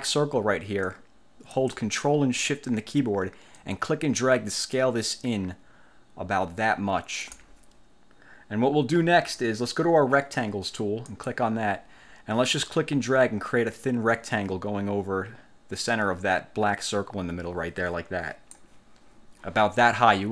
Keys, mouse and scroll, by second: 3.7-7.6 ctrl+shift+drag, 11.2 click, 12.7-18.8 drag.